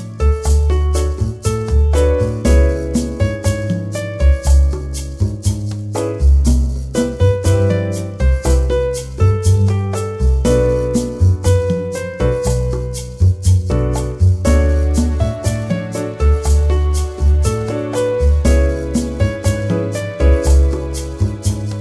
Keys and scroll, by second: 0.3 ., 1.4-3.2 typing, 4.5 BackSpace, 14.9 ctrl+0.